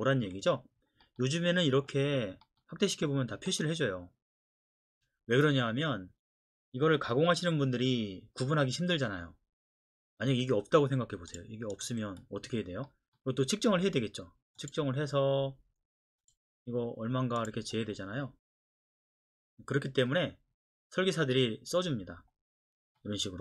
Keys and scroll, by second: 12.0 Delete.